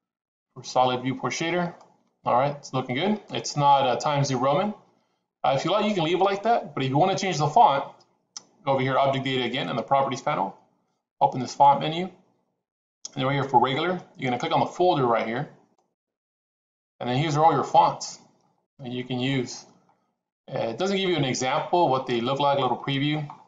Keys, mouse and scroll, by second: 0.6 shift+z, 1.6-2.9 middle drag, 11.4 click, 15.8 click.